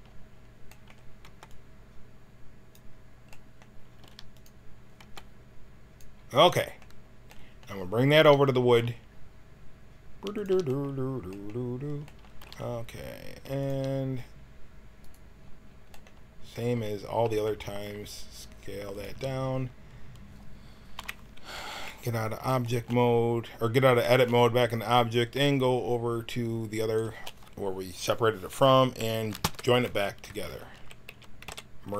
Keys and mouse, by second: 1.2 b, 3.9 g, 4.9 b, 8.1 g, 10.3-11.3 drag, 12.3 g, 14.9-16.8 drag, 17.1 s, 20.9 KP_1, 21.6 Tab, 26.8-29.5 drag, 29.5 ctrl+j, 30.2 Tab, 30.7 a, 31.0 a, 31.3 w.